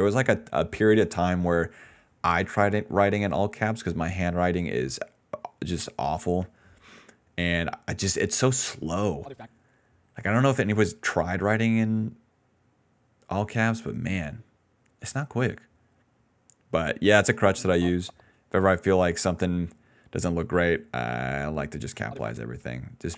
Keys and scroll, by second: 9.1 space, 9.4 space, 15.3 s, 22.0 space.